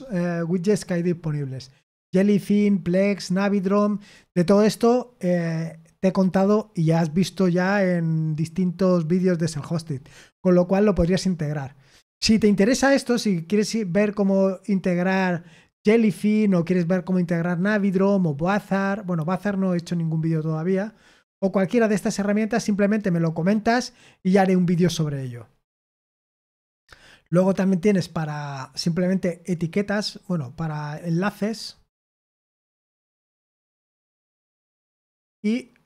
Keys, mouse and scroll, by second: 20.8 scroll down 2, 21.6 scroll down 4, 26.0-34.8 drag.